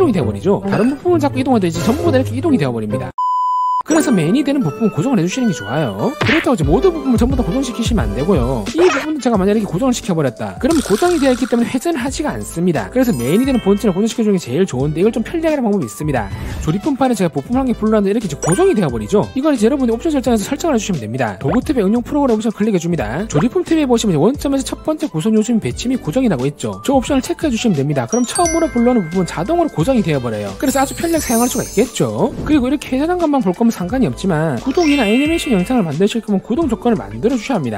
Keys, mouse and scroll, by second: 1.6-3.1 drag, 2.2 right click, 2.4 right click, 2.8 right click, 3.0 right click, 4.5 right click, 5.6 click, 7.3-8.7 drag, 8.0 right click, 8.1 right click, 9.0 right click, 10.3 click, 11.7-12.9 drag, 17.7 click, 23.2 click, 33.0-37.7 drag.